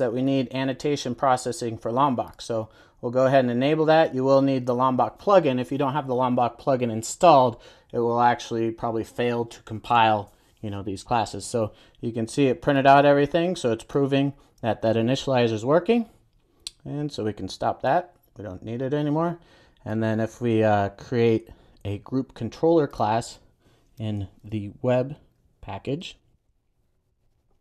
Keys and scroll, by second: 23.8 super+n.